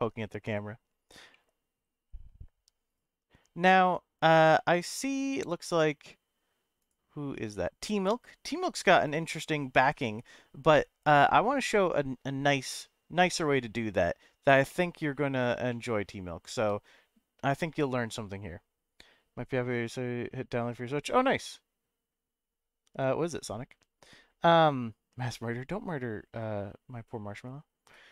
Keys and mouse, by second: 0.1 KP_0, 1.3 middle click, 14.7 middle click, 15.7 shift+middle click.